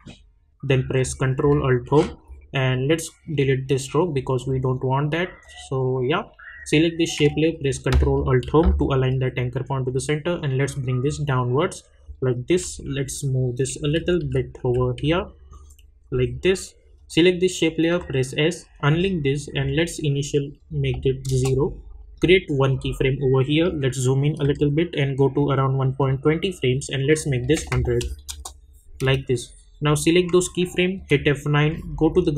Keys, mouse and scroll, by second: 1.8 ctrl+alt+Home, 3.3 click, 8.4 ctrl+alt+Home, 10.6-12.7 drag, 12.7 Down, 13.7 Right, 14.6 Down, 15.0 Up, 16.0 click, 17.9 s, 18.9 click, 21.3 Return, 22.7 click, 23.6 =, 24.4 =, 26.1 click, 28.3 Return, 29.1 click, 30.9 F9, 32.0-32.3 drag.